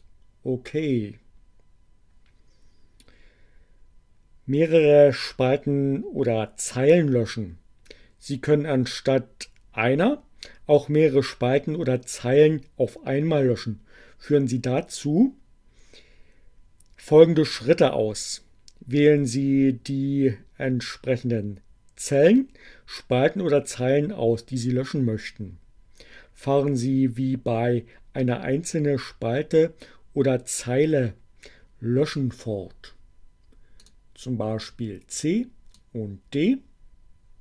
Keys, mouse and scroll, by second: 33.2 click, 35.1-36.1 drag.